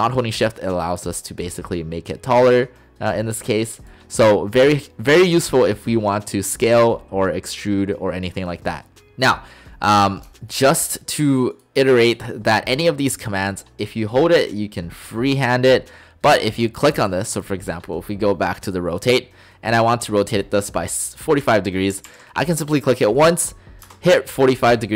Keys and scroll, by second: 22.0 typing, 23.9 Return.